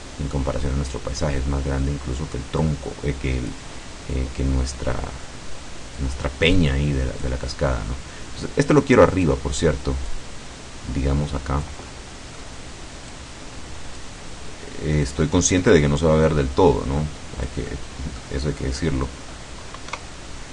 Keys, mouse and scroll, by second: 0.1 middle click, 2.7-3.8 drag, 6.1-7.5 drag, 8.8 click, 10.2-11.9 drag, 11.9 middle click, 13.2-14.3 drag, 15.1 click, 16.3-17.7 drag, 17.8 middle click, 18.5-18.9 scroll down 1, 18.9-20.0 scroll up 1, 20.0 KP_0.